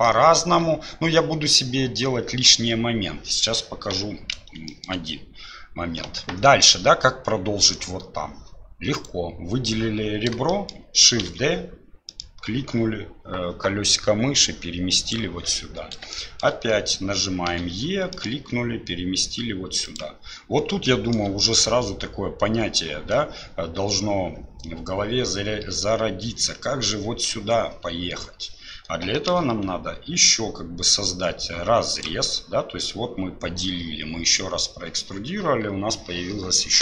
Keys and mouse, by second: 0.1 shift+click, 3.9 2, 4.7 shift+click, 10.5 shift+click, 11.2 shift+d, 16.2 shift+click, 21.0 shift+middle click.